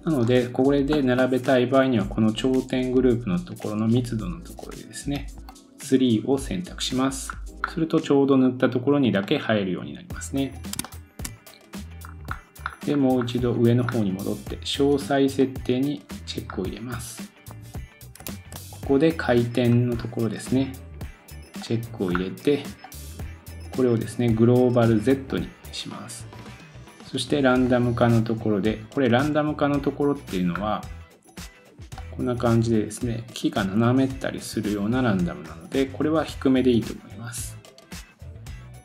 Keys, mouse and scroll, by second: 1.6-3.9 scroll down 2, 3.9-8.4 drag, 7.3-7.8 scroll up 2, 8.4 scroll up 1, 8.7 scroll down 2, 9.2 middle click, 10.8 shift+middle click, 11.3-12.1 drag, 12.0-12.7 scroll up 10, 13.1 scroll up 4, 15.4 click, 15.4 scroll up 5, 15.5-18.2 middle drag, 16.5-18.2 scroll down 4, 18.2 scroll down 1, 18.3 super+s, 19.7 scroll up 1, 19.9 scroll down 2, 21.6 click, 22.1 scroll up 2, 22.8-30.6 drag, 26.9 scroll down 7, 30.5 scroll up 2, 32.0 click, 32.6-38.8 drag.